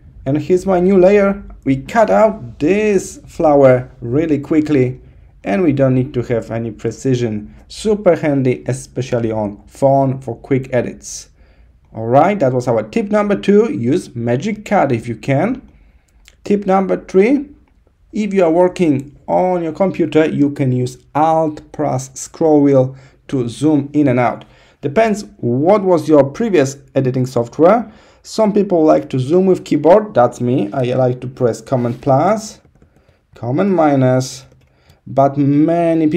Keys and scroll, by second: 31.9 super+=, 33.4 super+-.